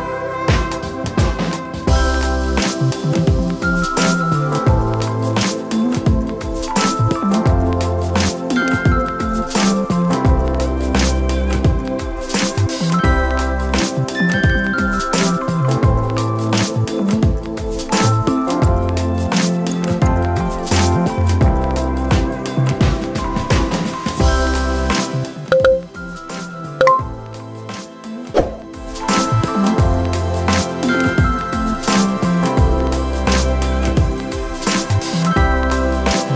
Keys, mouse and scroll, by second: 1.2 m, 4.0 shift+z, 5.5 Tab, 6.2 click, 6.9 Tab, 8.2 alt+click, 9.3 g, 13.7 ctrl+r, 16.2 alt+click, 17.5 shift+click, 18.3 x, 19.3 Tab, 19.8 ctrl+a, 20.6 Tab, 21.2 click, 21.8 ctrl+b, 25.5 Tab, 26.2-27.3 middle drag, 28.1 shift+c, 29.7-30.8 right drag, 32.0 ctrl+a, 33.6 drag, 34.8-36.3 drag.